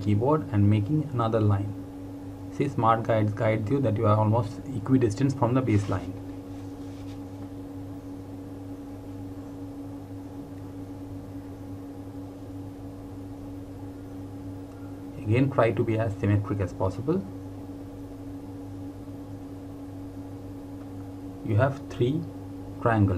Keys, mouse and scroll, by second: 4.6 click, 16.3 click, 21.8 click.